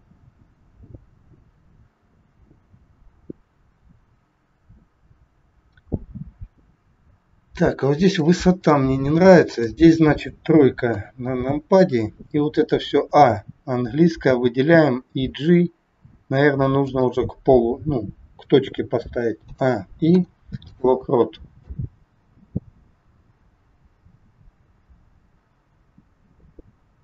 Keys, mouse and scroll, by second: 8.6 middle click, 11.0 KP_3, 12.8 a, 15.1 g, 19.9 i, 21.6 click.